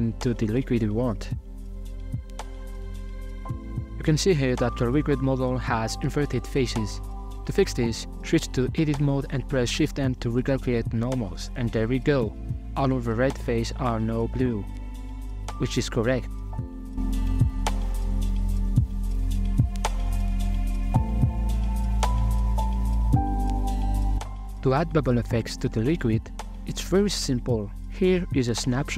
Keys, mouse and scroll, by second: 0.1 ctrl+b, 3.5 Tab, 3.9-6.4 drag, 6.4-6.9 middle drag, 6.9 scroll down 1, 7.1 middle click, 7.4 Tab, 7.6 a, 8.1 shift+n, 9.3 Tab, 9.7 scroll down 3, 9.9-10.8 middle drag, 10.8 right click, 11.0-14.2 drag, 14.2 shift+middle click, 14.3 ctrl+right click, 15.3 middle click, 15.6 a, 15.7 a, 16.1 scroll down 2, 16.4-17.6 shift+middle drag, 17.6 x, 17.8 middle click, 18.1-18.8 scroll up 8, 18.8 middle click, 19.5-22.6 drag, 23.1-24.0 middle drag, 24.9 KP_Divide, 25.4-27.5 shift+middle drag, 27.5 z, 28.6 middle click.